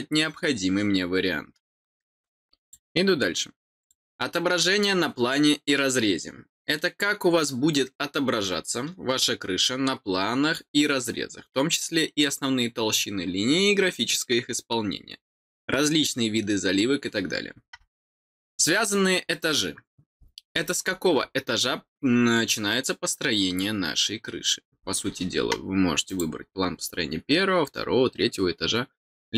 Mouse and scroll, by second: 2.6 click, 3.8 click, 18.4 click, 26.0 click.